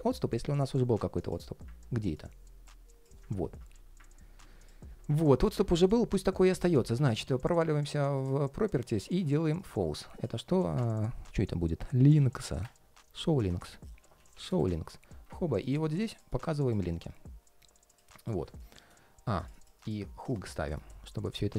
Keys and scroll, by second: 10.3 super+a.